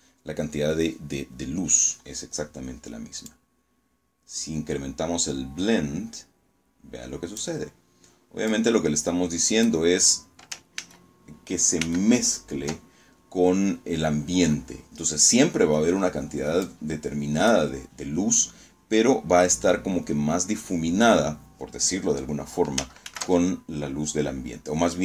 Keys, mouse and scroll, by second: 2.1-6.5 drag, 7.4-8.7 drag, 9.7 ctrl+z, 10.7 ctrl+z, 15.5-16.6 drag, 21.9 ctrl+z.